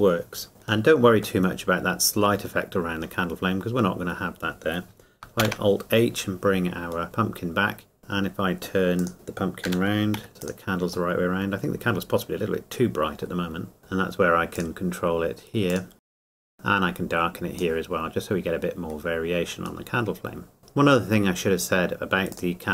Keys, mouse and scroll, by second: 0.5-0.8 scroll up 1, 0.8 middle click, 3.5 middle click, 4.0 scroll down 1, 5.4 alt+h, 7.0 middle click, 9.0 click, 9.6 r, 10.4 click, 11.1 middle click, 13.8 scroll up 1, 16.0 click, 16.4 shift+middle click, 16.4 click, 18.2 scroll up 1, 19.8 scroll down 1, 20.2 middle click, 20.6 scroll up 1, 22.3 click.